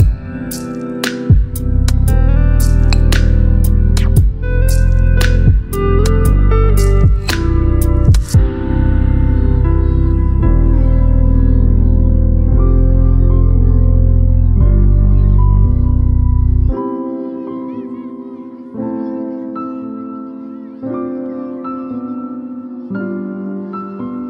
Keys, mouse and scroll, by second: 7.1 ctrl+Num_Lock, 7.4 ctrl+click, 8.7 click, 10.9 alt+BackSpace, 11.9 ctrl+d, 13.8 click, 18.9 click, 19.0 click, 21.3 ctrl+click.